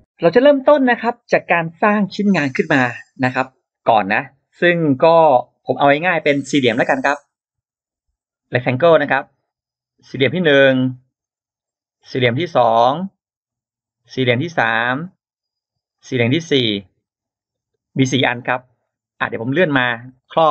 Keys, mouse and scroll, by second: 7.4 click, 8.2 click, 9.2 click, 10.4 click, 11.0 scroll up 1, 11.5 click, 12.4 click, 13.3 click, 14.3 click, 14.6-14.9 scroll down 1, 15.7 click, 16.5 click, 16.8 scroll down 1, 17.2 scroll up 1, 17.5 space, 18.6-18.9 scroll down 1, 19.1-20.3 drag.